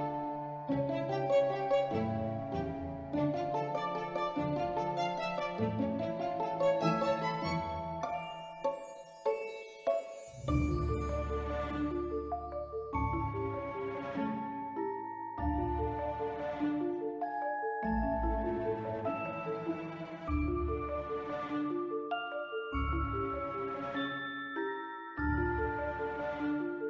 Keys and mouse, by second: 1.0 right click, 2.0 z, 3.5-4.7 drag, 5.3 click, 6.4 Tab, 7.0 3, 7.3 click, 7.8 s, 8.7 click, 8.8 Tab, 9.2 middle drag, 9.7 r, 10.0 x, 11.0 click, 11.2 middle click, 11.7 s, 12.4 click, 13.3-13.6 middle drag, 13.8-14.1 middle drag, 14.4-14.8 middle drag, 21.6 middle click, 23.3-25.0 drag, 25.3 ctrl+middle drag, 25.8-26.2 shift+middle drag.